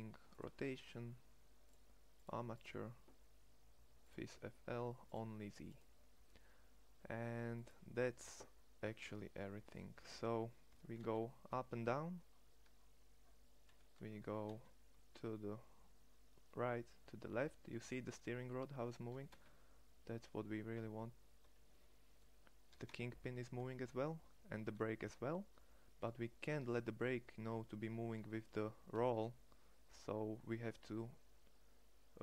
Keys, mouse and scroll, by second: 10.7 g, 14.1 r, 19.1 r, 22.7 r, 28.2 r.